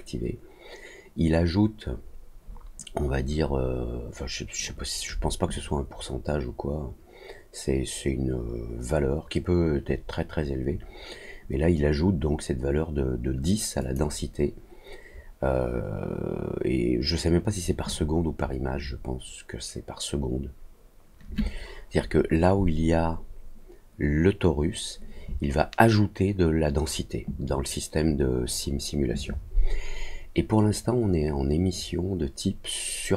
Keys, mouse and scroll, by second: 13.7 click.